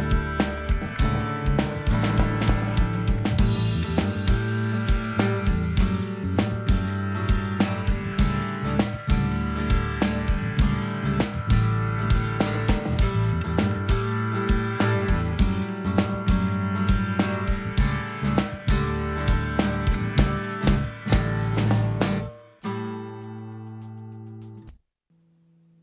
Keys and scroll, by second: 24.4 space.